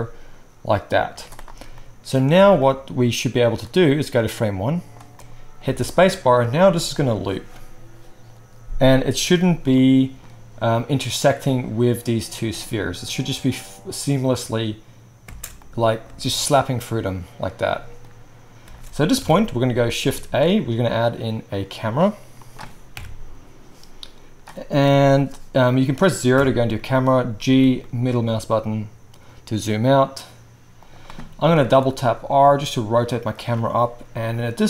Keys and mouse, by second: 1.1 z, 2.4 alt+a, 5.7 space, 15.2 space, 15.6-16.0 drag, 15.6-16.0 middle drag, 15.6-16.0 right drag, 16.0 space, 18.6 space, 19.2 KP_1, 20.2 shift+a, 26.3 KP_0, 27.4 g, 30.9-34.3 drag, 31.5 r.